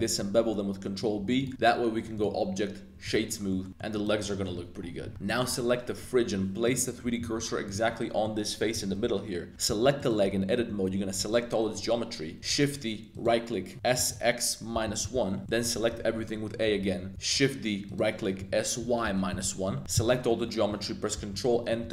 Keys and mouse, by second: 1.4 click, 1.5 Tab, 2.2-3.1 drag, 3.5 middle click, 3.7 a, 4.3 middle drag, 5.1 y, 5.2 middle click, 5.5 Tab, 6.0 3, 6.6 click, 7.2 shift+s, 8.2 middle click, 9.0 Tab, 9.6-12.4 typing, 10.0 click, 10.2 Tab, 13.1 click, 13.7-16.1 typing, 15.0 Return, 15.4 click, 17.1 shift+d, 17.9 click, 18.4-19.9 typing, 19.3 Return, 20.0 click, 21.1 super+n, 21.5 click, 21.8 Tab.